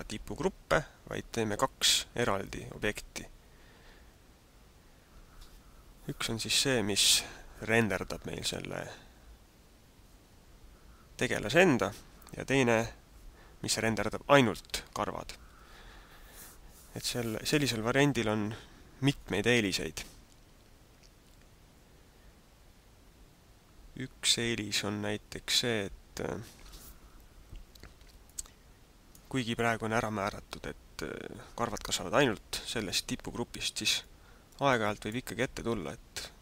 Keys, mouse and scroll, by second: 28.4 middle click, 34.2 middle click.